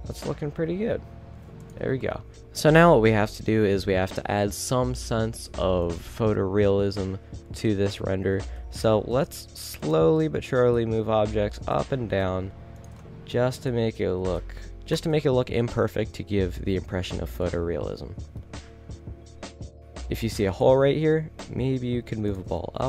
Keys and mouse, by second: 0.6 r, 1.8 r, 1.9 a, 2.4 ctrl+s, 2.4 Escape, 2.4 z, 5.4-5.9 middle drag, 5.9 right drag, 8.2 g, 10.0 a, 11.4 g, 12.5-13.1 middle drag, 13.3 a, 13.8 g, 15.1 a, 17.6-18.4 middle drag, 20.6-21.1 right drag, 21.3 g.